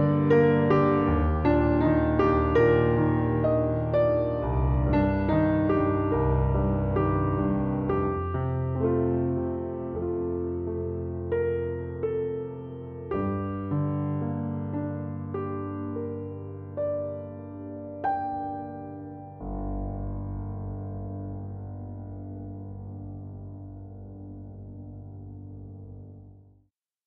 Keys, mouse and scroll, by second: 5.8-7.8 drag, 5.8-7.8 right drag, 8.6 click, 8.6 right click, 11.7-12.8 drag, 11.7-12.8 right drag, 12.8-16.4 middle drag, 16.4 click, 16.4 right click, 16.5-16.9 middle drag, 17.6 space, 20.8 space, 21.9 middle click, 22.5 space, 25.5-26.1 middle drag, 25.8 space.